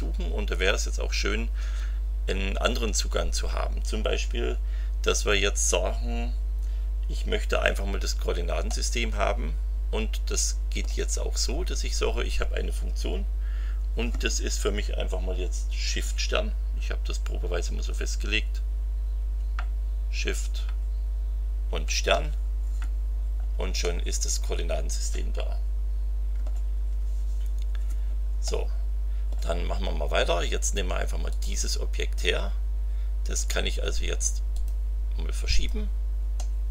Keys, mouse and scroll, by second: 8.7-11.0 drag, 23.8-26.6 drag, 28.4-29.5 drag, 31.3 click, 33.3 click, 34.5 click, 35.5 click, 36.3-36.7 middle drag.